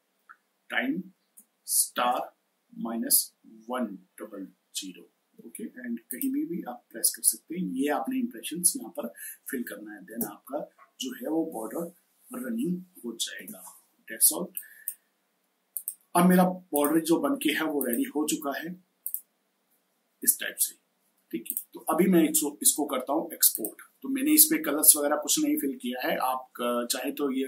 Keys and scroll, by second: 0.0-0.4 typing, 1.7 shift+8, 2.6 -, 3.6-4.0 typing, 10.1 space, 13.2 space.